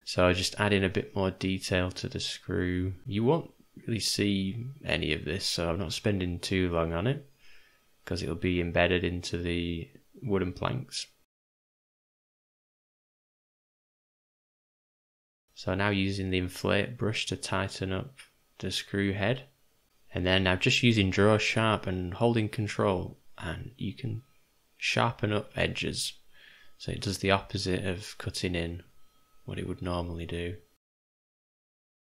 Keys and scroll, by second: 13.3 ], 13.6 ], 13.7 ], 19.9 g, 19.9 [, 20.0 [, 20.2 [, 26.4 v, 31.7 o.